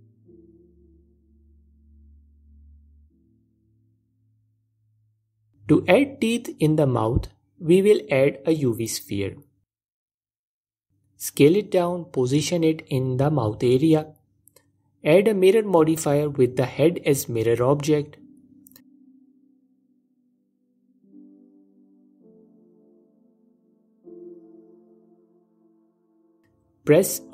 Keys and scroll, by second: 0.0 Page_Up, 1.4 f, 3.2 Page_Up, 7.1 ctrl+Tab, 8.3 shift+a, 10.6 s, 13.6 s, 15.3 s.